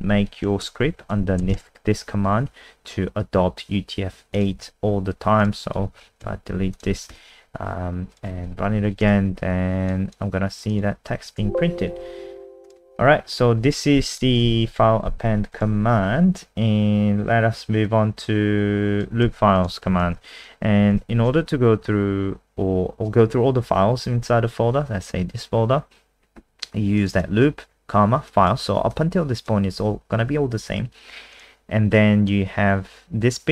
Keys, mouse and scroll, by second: 0.4 ctrl+Home, 0.6 Return, 0.8 Up, 1.1 ctrl+v, 4.3 click, 4.6 ctrl+s, 5.4 click, 5.8 End, 6.0 Home, 6.2 Delete, 6.7 click, 6.9 ctrl+s, 7.1 F5, 8.1 click, 8.6 End, 8.8 Home, 9.0 Return, 9.9 click, 11.1 alt+F4, 11.4 n, 12.6 click, 13.1 End, 13.3 Home, 13.6 Delete, 14.1 click, 14.4 ctrl+a, 14.7 Delete, 15.5 click, 15.9-17.8 scroll down 3, 17.8 click, 19.2 ctrl+c, 19.5 click, 20.0 ctrl+v, 20.9 ctrl+s, 27.0 click, 27.1 click, 28.3 click.